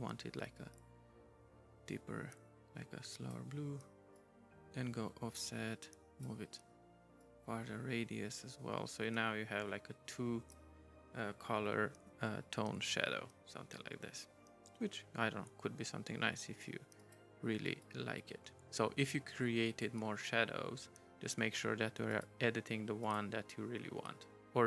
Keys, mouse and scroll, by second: 0.6 right click, 4.1 right click, 7.2 right click, 17.0 right click, 22.1 right click, 23.0 right click.